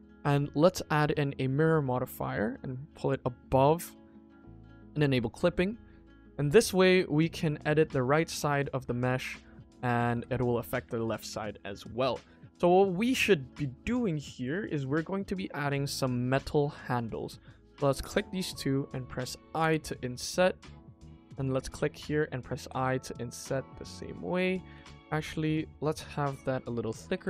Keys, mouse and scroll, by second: 1.7-3.0 drag, 3.7-4.1 middle drag, 4.9 click, 5.2 click, 6.0 click, 6.6-7.6 middle drag, 8.1 shift+middle drag, 8.4 click, 8.5 Tab, 9.1 click, 9.7 click, 10.1 g, 10.9 click, 11.2 Tab, 11.9 KP_1, 12.2 click, 12.4 Tab, 12.9-13.4 scroll up 2, 13.4 middle click, 14.3 click, 14.7 click, 15.2 middle click, 16.0 click, 16.7 middle click, 17.9 shift+click, 18.4 middle click, 19.5 i, 21.3 click, 21.6 middle click, 22.5 i, 24.1 middle click, 24.5 ctrl+z, 25.3-26.5 middle drag, 27.1 i.